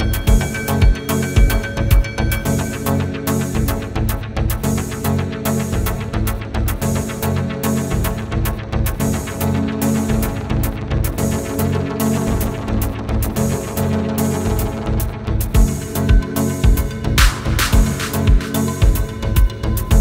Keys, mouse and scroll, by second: 0.1-1.1 typing, 1.2 Return, 4.5 click, 5.3 0, 5.6 Return, 8.0 click, 11.2-18.1 typing, 19.4 click.